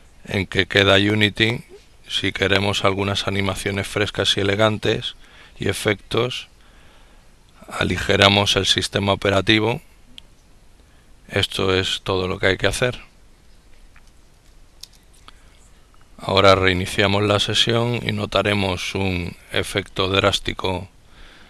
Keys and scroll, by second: 12.8 ctrl+e, 13.2 ctrl+x, 13.4 ctrl+i, 13.8 ctrl+t, 14.1 ctrl+Return.